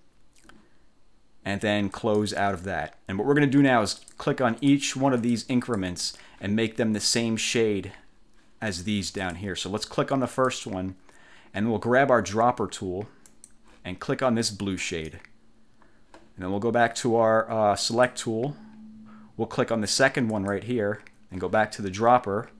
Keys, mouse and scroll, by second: 2.1 click, 4.1 click, 4.7 click, 5.3 click, 5.7 click, 7.2 click, 9.3 click, 10.5 click, 13.4 click, 14.9 click, 17.9 click, 20.4 click.